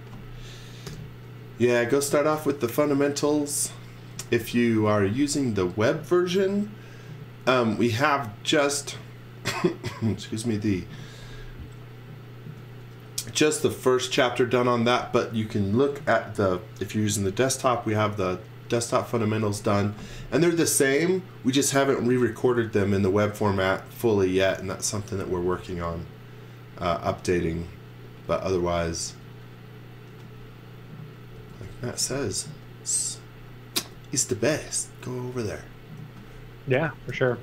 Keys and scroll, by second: 1.7 space, 2.7 space, 3.4 x, 4.1 z, 4.8 x, 19.3 x, 25.0 x, 25.3 v, 29.1 space, 30.1 m, 31.3 space, 31.8 x, 32.1 v, 33.8 space, 34.2 x, 35.3-37.4 typing.